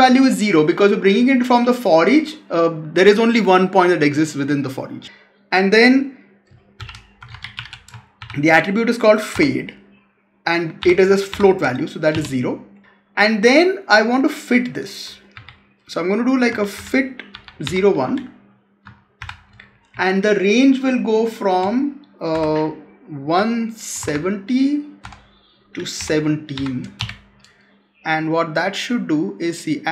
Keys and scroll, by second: 15.2 Left, 19.8 Right.